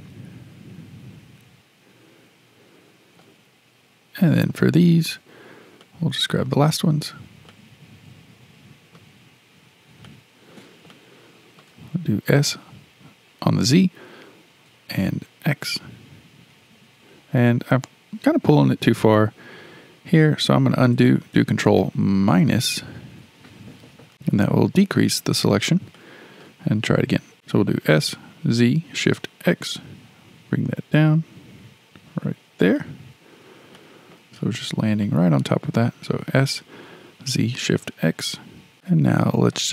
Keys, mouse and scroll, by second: 4.4 click, 5.4 scroll down 4, 5.8-7.5 shift+middle drag, 7.5 click, 9.6-10.1 scroll up 3, 10.1-12.2 shift+middle drag, 12.2 s, 22.1 ctrl+KP_Subtract, 25.9-27.3 shift+middle drag, 27.3 s, 27.8 s, 33.7-34.2 shift+middle drag, 34.2-35.0 scroll up 5, 35.0-36.2 shift+middle drag, 36.2 s, 38.7-39.7 shift+middle drag.